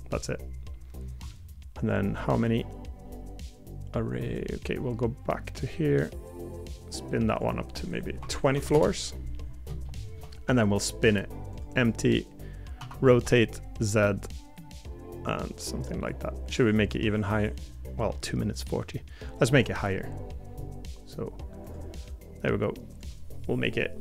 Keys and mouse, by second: 9.8 shift+middle click, 17.1 middle click, 18.1 middle click, 18.4 middle click.